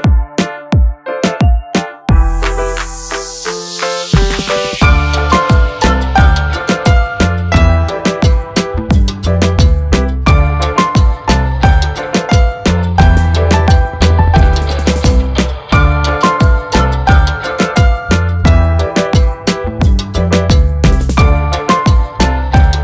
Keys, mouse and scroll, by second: 1.8 j, 3.5 k, 7.5 shift+click, 8.4 c, 9.6 click, 10.9 scroll down 1, 12.0 ctrl+click, 12.9 scroll up 1, 14.8 F8, 16.2 j, 17.2 k, 18.0 e, 18.9 scroll down 1.